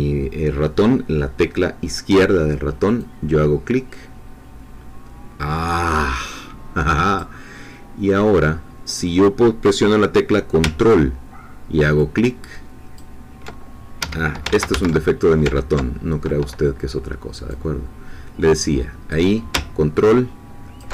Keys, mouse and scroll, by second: 3.0-7.3 drag, 11.9-13.1 ctrl+drag, 14.4 ctrl+Escape, 14.5 ctrl+z, 17.5-19.3 drag, 20.0 ctrl+click.